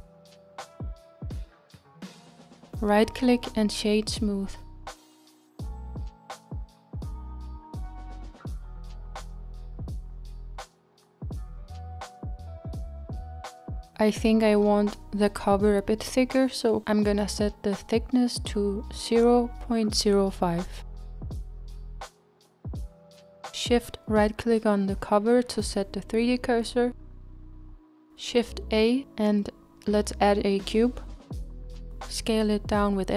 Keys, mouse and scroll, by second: 1.9 click, 2.2 middle click, 2.5 Tab, 5.2-6.2 right drag, 6.2 click, 6.7-7.9 middle drag, 7.9-8.6 scroll down 4, 8.6-9.6 middle drag, 9.6-12.5 scroll up 3, 12.5 click, 12.9-13.9 middle drag, 13.9-16.5 scroll up 2, 16.5 click, 21.0 scroll down 2, 21.3-26.8 middle drag, 27.9 shift+right click, 28.5 shift+a, 31.6 s.